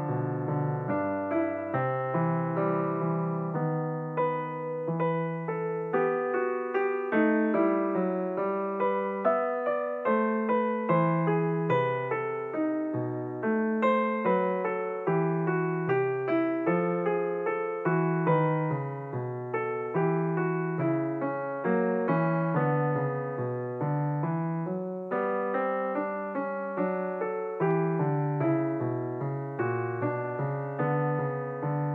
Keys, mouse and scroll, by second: 1.7 shift+click, 3.5 ctrl+p, 5.4 click, 8.0 click, 8.4 click, 14.9 click, 16.8 g, 22.8 scroll up 1, 24.0 s, 25.8-26.2 scroll up 5, 27.2-29.3 scroll up 3, 31.6 click.